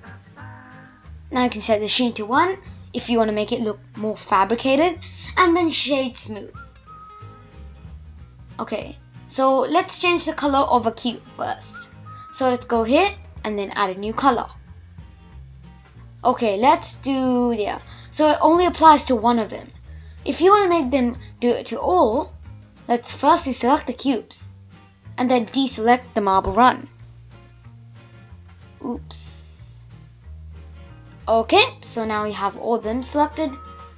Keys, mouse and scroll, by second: 1.7-3.1 drag, 4.2 click, 4.6-7.1 right drag, 7.1 middle click, 8.0 click, 10.4-12.9 middle drag, 12.9 click, 13.9 click, 14.2-15.3 drag, 19.1-20.3 middle drag, 20.3 click, 21.1 click, 22.4 click, 25.1-27.2 middle drag, 27.2 shift+click, 27.9 shift+click, 29.0 shift+click, 29.6 shift+click, 31.0 shift+click, 31.6 shift+click, 32.5-33.9 middle drag.